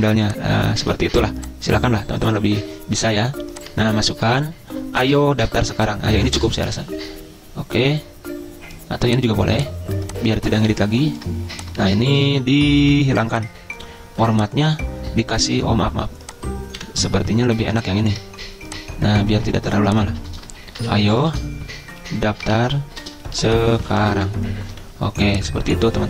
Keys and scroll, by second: 12.0 ctrl+a, 16.9 Delete, 20.2 ctrl+a, 20.6-24.8 typing.